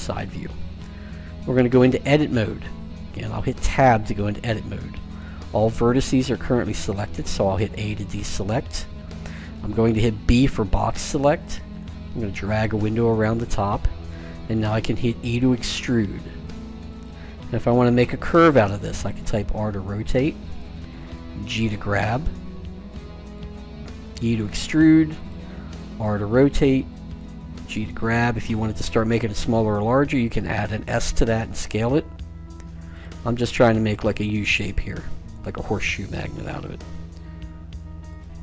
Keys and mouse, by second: 3.2 Tab, 7.4 a, 10.0 b, 15.1 e, 19.2 r, 21.6 g, 24.1 e, 25.8 r, 27.3-28.9 drag, 27.4 g, 31.8 e, 33.5 r, 35.6 g.